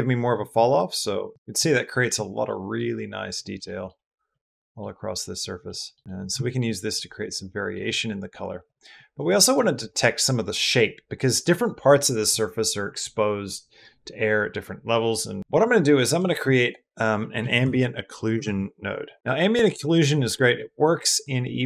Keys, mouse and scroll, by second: 1.3 shift+middle click, 1.5-1.8 middle drag, 2.3 middle drag, 3.4-3.7 shift+middle drag, 4.1-4.6 middle drag, 5.5-5.8 middle drag, 5.9 middle click, 6.3 shift+middle drag, 6.5 middle drag, 6.9-7.6 middle drag, 7.7 middle drag, 8.5 click, 8.9 click, 9.2 click, 15.8 click, 16.1 shift+a, 19.2 g, 19.7 click, 20.4 click, 20.9 click.